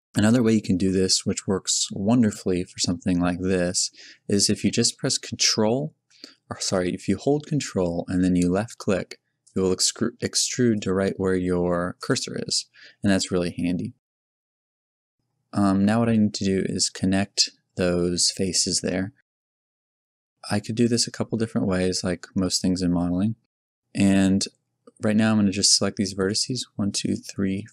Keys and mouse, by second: 0.9 g, 13.4 g, 13.9-15.1 middle drag, 16.2 z, 21.7-23.5 middle drag.